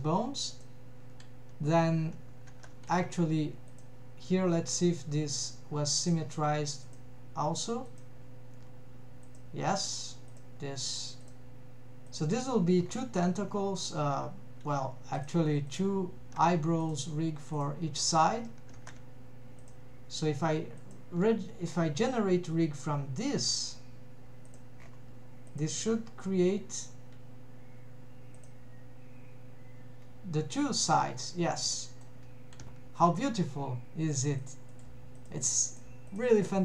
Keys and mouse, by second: 2.5 ctrl+Tab, 6.9 click, 8.0 click, 9.3 click, 10.3 drag, 15.7 drag, 17.6 click, 18.9 ctrl+Tab, 19.6 click, 20.8 click, 25.6 drag, 29.3 click, 30.4 middle click, 31.8 middle drag, 32.8 ctrl+Tab, 34.2 shift+click, 34.6 g, 36.2 Escape.